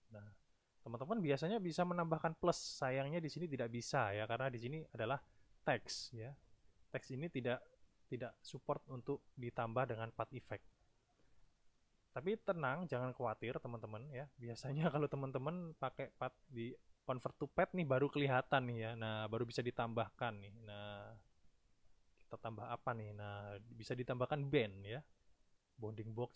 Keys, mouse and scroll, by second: 15.7 click, 16.9 click, 19.8 click, 21.9 click, 23.0 click.